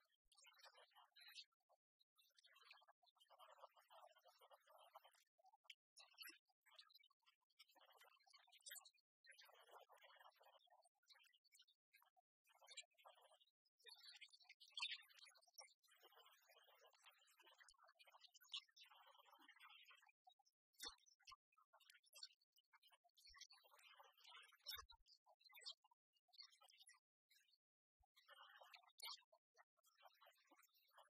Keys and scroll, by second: 15.3 Return.